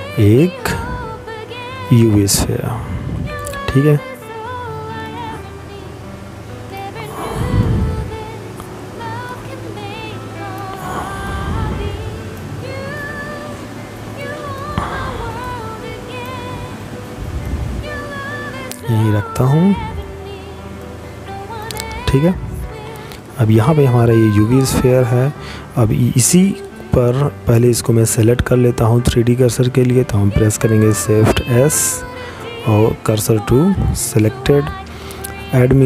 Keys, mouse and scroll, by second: 2.6 click, 5.2 middle click, 7.0 click, 10.5 middle click, 13.1 click, 17.1 middle click, 18.5 click, 33.3 click.